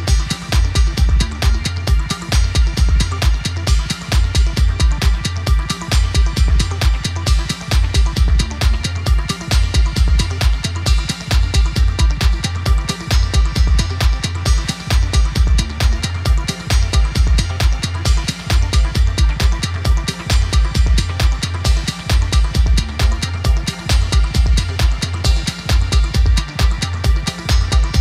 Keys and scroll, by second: 7.2 ctrl+w, 7.7 Down, 8.2 ctrl+w, 9.2 Down, 9.6 ctrl+w, 10.5 Up, 12.5 alt+F9, 15.7-18.0 typing, 18.8 alt+F9, 20.5 1, 21.8-24.0 typing, 26.0 alt+F9, 27.7-28.0 typing.